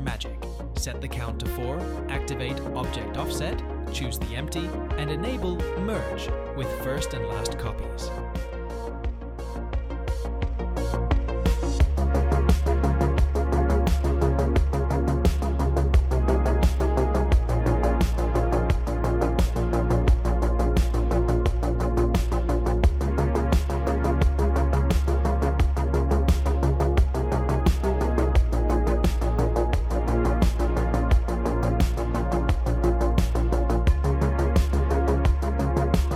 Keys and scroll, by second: 15.0 Tab, 16.4 3, 18.7 e, 21.3 g, 22.2 g, 25.9 g, 27.6 1, 28.0 g, 29.1 g, 30.9 g, 33.3 e, 34.6 g.